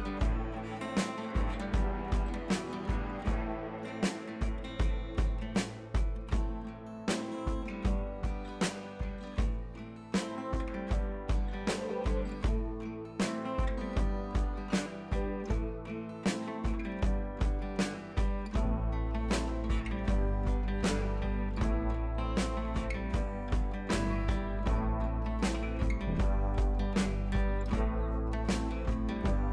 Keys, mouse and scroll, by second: 2.1 ctrl+t, 2.7-3.3 alt+click, 3.6 Down, 5.0-5.3 click, 5.6 shift+click, 6.2 click, 7.2 Up, 8.2-8.5 click, 10.1 scroll down 1, 10.3 scroll up 1, 10.5 click, 10.9 ctrl+t, 11.4-12.6 alt+drag, 13.6-13.9 drag, 16.2 Up, 17.3 shift+click, 17.9 click, 18.2 scroll down 1, 18.9 click, 19.1 Up, 21.1 click, 21.5 scroll up 1, 21.7 click, 22.0 Up, 24.3 click, 24.4 Up, 26.8 ctrl+t, 27.3-28.3 drag, 29.1-29.5 scroll up 1.